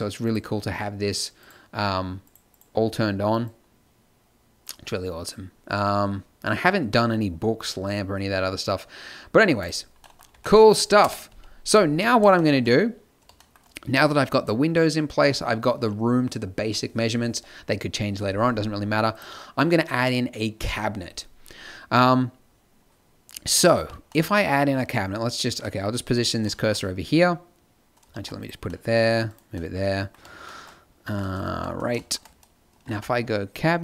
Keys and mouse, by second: 0.2-5.3 drag, 5.3-9.6 middle drag, 9.6 click, 10.3 t, 11.0 KP_0, 11.2 z, 23.7 z, 28.1 shift+s, 29.5-31.0 drag, 31.0 a, 32.9 t.